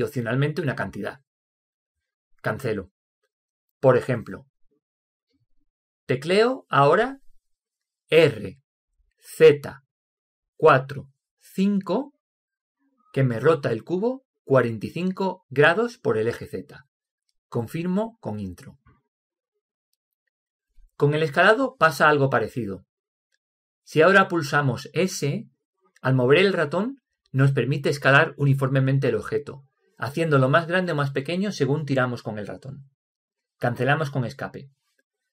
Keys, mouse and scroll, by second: 8.7 r, 25.4 s, 33.4 Escape.